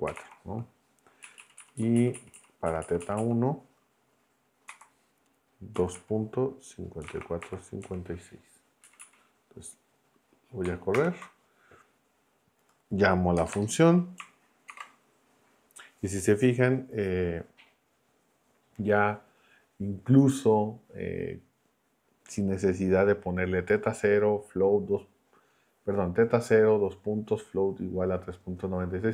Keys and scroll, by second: 0.0-0.7 typing, 1.2 Right, 1.5 Left, 2.3 Right, 2.9 Right, 4.7-7.8 typing, 8.8 Right, 10.9 ctrl+Return, 13.3 BackSpace, 14.7 shift+9.